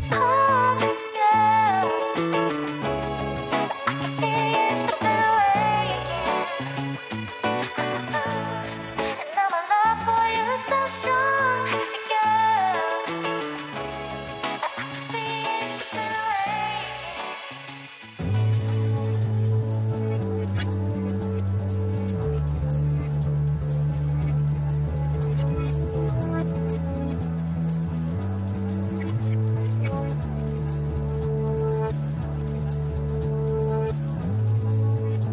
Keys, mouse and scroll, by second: 0.9 shift+click, 2.0 shift+click, 2.5 shift+click, 3.5-4.0 scroll up 1, 4.0-7.0 shift+middle drag, 7.6 ctrl+b, 15.6-16.7 scroll down 2, 16.7 shift+z, 21.8 click, 23.8 click, 26.6-27.0 scroll down 2, 27.0-28.2 middle drag, 28.2-29.4 scroll up 1, 29.4 g.